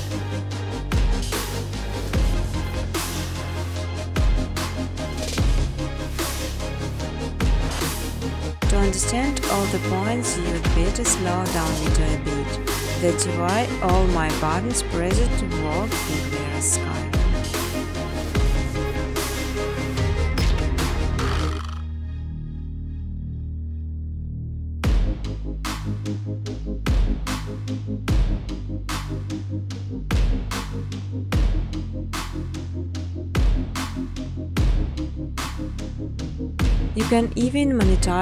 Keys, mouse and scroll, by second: 0.2 click, 0.4-1.2 typing, 0.5 click, 1.5 click, 2.3 click, 3.9 click, 5.2-7.0 typing, 7.8 Tab, 8.7-9.7 typing, 10.3 Tab, 11.3 Tab, 11.7 Tab, 11.8-15.2 typing, 17.1-17.8 typing, 17.4 right click, 19.4 click, 20.1-21.3 typing, 22.9 click, 26.2 click, 27.3 click, 28.3 click, 29.5 click, 30.8 click, 32.3-34.4 typing, 34.9 Tab, 35.5-37.1 typing.